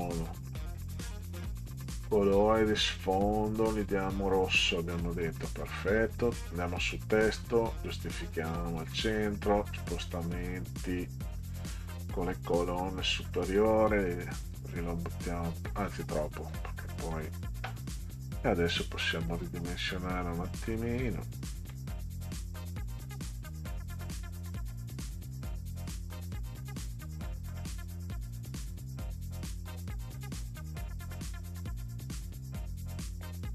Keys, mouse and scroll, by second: 0.6 click, 1.7-2.0 scroll up 2, 2.8 click, 3.7 scroll down 2, 4.6 click, 5.4-5.8 scroll up 2, 6.5 click, 7.9 click, 9.7 click, 10.3 click, 11.5 click, 13.5 click, 14.0 click, 14.2 click, 14.4 click, 15.1 click, 16.3 click, 16.5 click, 18.1 click, 19.2 click, 21.0 click, 22.9 click, 23.6 click, 24.4 click, 29.2-30.3 drag, 33.3 click.